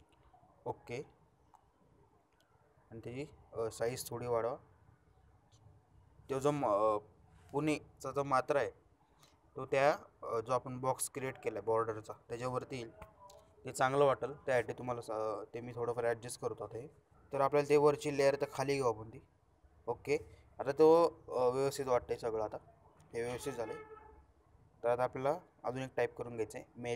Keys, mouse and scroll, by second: 0.9 shift+click, 3.5-4.4 shift+drag, 10.6-11.2 shift+drag, 18.3-19.1 shift+drag, 24.5 shift+click, 26.8 shift+click.